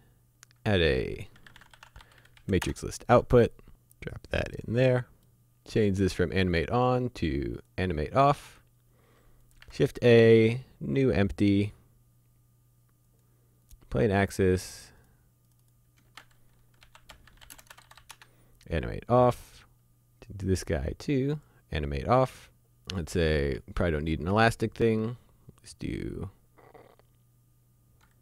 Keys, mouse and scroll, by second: 1.4-2.0 typing, 2.4 Down, 2.6 Return, 4.1 click, 5.1 middle click, 5.9 click, 9.7 shift+a, 13.1 click, 16.1-18.0 typing, 18.1 Return, 19.3 middle click, 19.6-20.5 scroll up 1, 21.3 click, 22.3 middle click, 23.8 click.